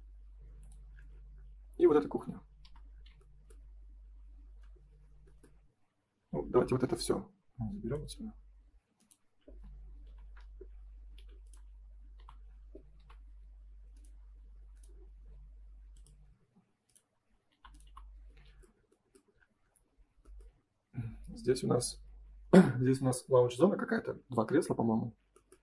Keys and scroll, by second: 9.4 space, 10.0 F3, 11.1 F4, 12.1 Delete, 16.4 space, 17.4 Delete.